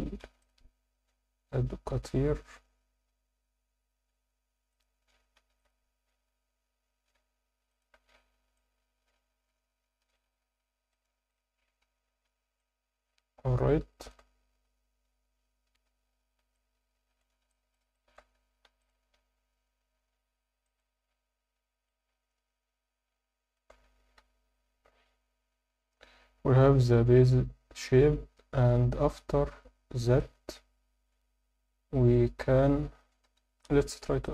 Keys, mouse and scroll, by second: 0.2 ctrl+r, 4.7 click, 5.4 ctrl+r, 7.7 shift+click, 8.0 scroll down 2, 8.1 Tab, 8.6-10.1 middle drag, 10.3-10.7 scroll up 1, 10.9-11.6 right drag, 11.8 Tab, 12.2 Tab, 12.6-14.1 middle drag, 14.6 Tab, 15.7 Tab, 16.2 Tab, 16.6 alt+middle click, 17.5 alt+shift+middle click, 17.9 ctrl+middle click, 18.6 ctrl+r, 20.6 click, 20.9 Tab, 21.1-21.6 scroll down 1, 21.6 scroll down 2, 21.8-23.6 alt+middle drag, 24.1 KP_7, 26.4 Tab.